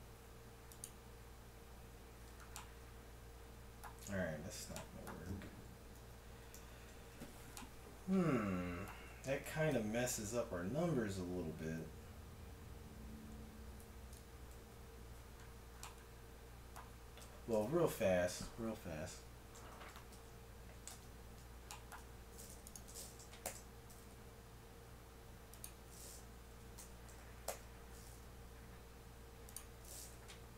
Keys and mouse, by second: 4.1 ctrl+z, 5.3 ctrl+z, 6.0 ctrl+z, 6.5 ctrl+z, 9.4 KP_1, 9.8 KP_7, 14.1 KP_1, 14.6 KP_7, 17.2 KP_1, 19.7 Tab, 21.0 ctrl+Tab, 22.0 Tab, 23.5 shift+s, 26.5 a, 26.8 Tab, 27.4 shift+a.